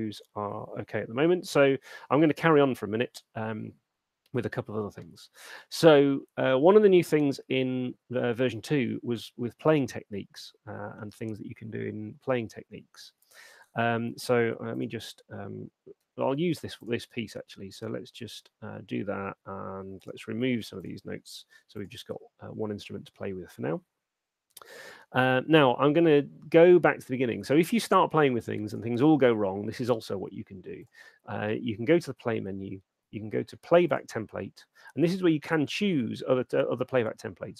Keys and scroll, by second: 16.2 ], 21.4 BackSpace.